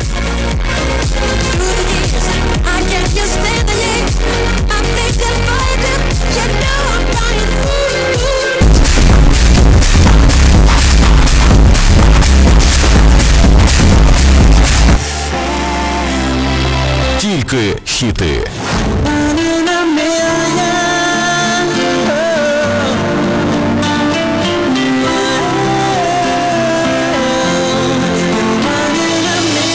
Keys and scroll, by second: 14.8 Page_Down.